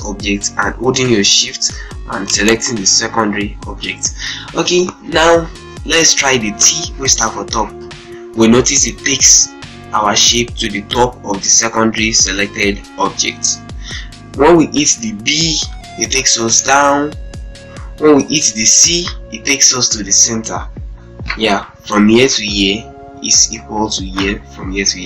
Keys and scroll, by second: 7.6 t, 15.6 b, 18.6 c.